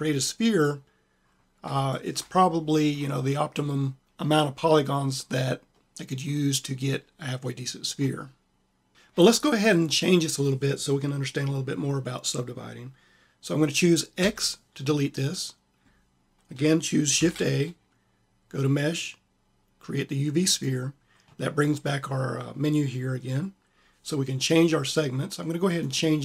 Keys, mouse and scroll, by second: 1.5 middle click, 2.1 middle click, 3.2 click, 3.7 middle click, 4.0-5.0 drag, 5.3 middle click, 8.0 middle click, 8.4 click, 14.1 x, 17.1 shift+a, 25.7-26.2 drag.